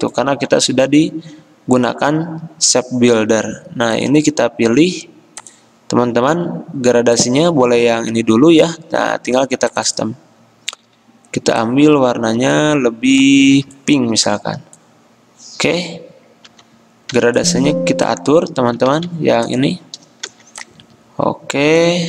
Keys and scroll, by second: 0.4 ctrl+z, 16.5-17.2 typing, 19.0 ctrl+z, 20.3 g.